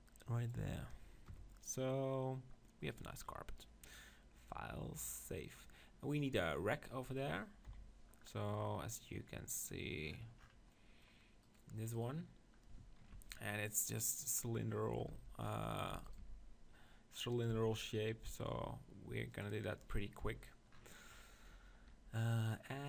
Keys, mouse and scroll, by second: 0.4 middle click, 0.4 right click, 1.3 KP_0, 2.9-6.3 drag, 4.6 right click, 7.7 KP_7, 9.6-13.1 drag, 11.5-15.6 middle drag, 15.1 Tab, 15.9 Tab, 16.2 Tab, 17.5 Tab, 19.3-21.3 drag, 20.2 KP_7, 21.3-22.6 middle drag, 22.6-22.8 drag.